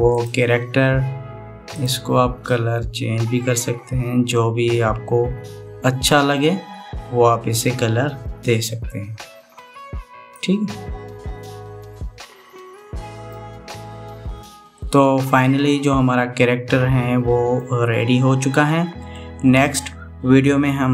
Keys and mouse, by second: 0.8 click, 13.0-14.1 middle drag, 15.4-18.3 middle drag, 18.9-19.9 middle drag.